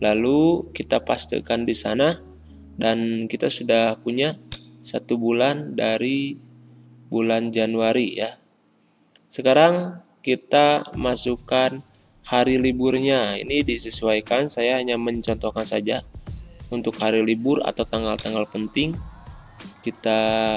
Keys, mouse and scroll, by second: 6.9 scroll up 1, 8.2 ctrl+l, 9.8-12.3 typing, 14.2-15.8 typing, 18.1-20.3 drag.